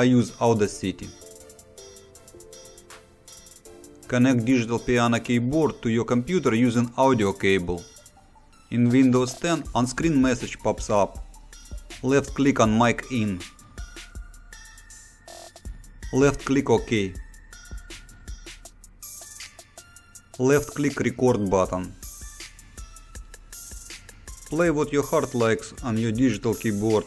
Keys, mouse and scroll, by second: 1.4 click, 12.4 click, 17.8 click, 21.7 click.